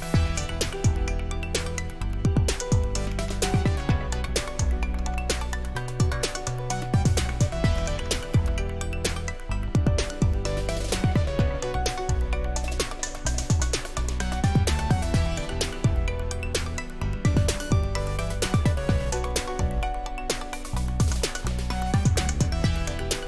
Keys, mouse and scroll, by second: 0.0 click, 1.9 click, 2.8-5.0 typing, 7.8 Down, 8.0 Down, 8.3 Return, 11.5 click, 11.9 click, 12.7-14.9 scroll down 3, 15.0 click, 16.3 click, 19.2 click, 19.4 click, 21.1 click.